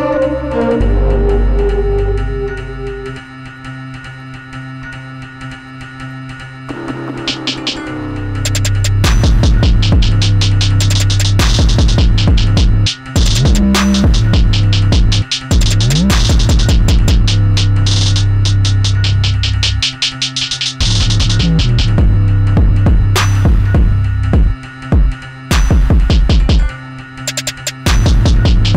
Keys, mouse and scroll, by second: 0.5-7.3 right drag, 7.3 click, 8.6-10.7 drag, 10.7-11.8 middle drag, 11.8 click, 13.1 click, 14.4 click, 16.5-19.5 right drag, 19.5 click, 20.8 click, 22.1 click, 23.3-24.9 drag, 25.4-27.8 middle drag, 27.8-28.7 scroll up 1.